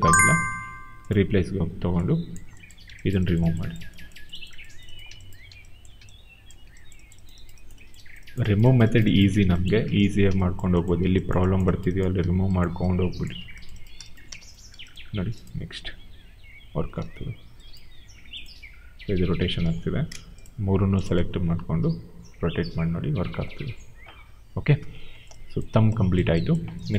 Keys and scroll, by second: 14.2 w, 15.6 e, 16.9 ctrl+z, 19.5 ctrl+z, 23.8 ctrl+z.